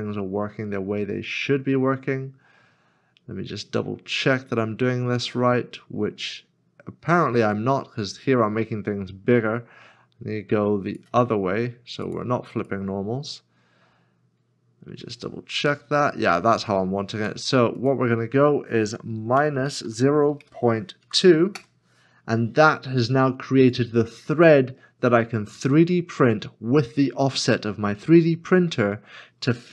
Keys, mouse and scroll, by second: 19.4 -, 20.4 ., 21.0 2, 21.5 Return, 25.1 middle click, 26.5 scroll down 1, 27.6 middle click.